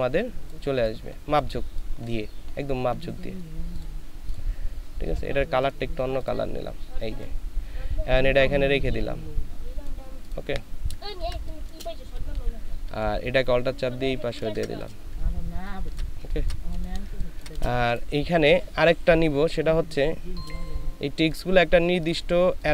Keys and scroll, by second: 11.1 ctrl+space, 12.1 ctrl+alt+space, 12.8 ctrl+alt+shift+space, 15.2 ctrl+alt+shift+space, 20.9 ctrl+space, 22.4 ctrl+space.